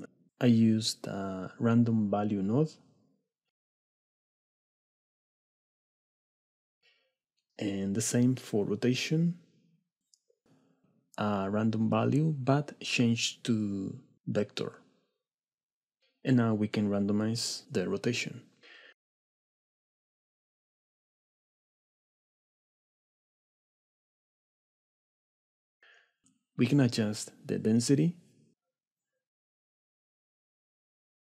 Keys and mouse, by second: 2.2 middle click, 2.8-4.2 shift+drag, 4.6 shift+click, 5.8 shift+click, 6.8 middle click, 7.5 middle click, 8.2 click, 9.7 middle drag, 10.5 middle click, 11.3-12.6 drag, 14.0-16.4 shift+drag, 17.3-19.2 shift+drag, 19.8-21.6 shift+drag, 22.4 click, 22.4 right click, 22.9 middle click, 27.0-28.4 shift+middle drag, 29.0-30.4 drag, 31.1 click.